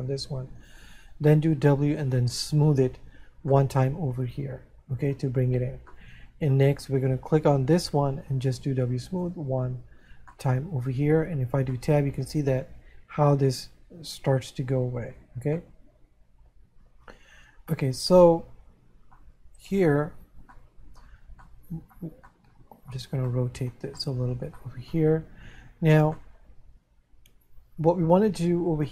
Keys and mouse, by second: 4.2 middle click, 6.3 middle click, 11.0 middle click, 12.4 middle click, 16.1 middle click, 18.4 middle click, 21.8 middle click, 26.2 middle click.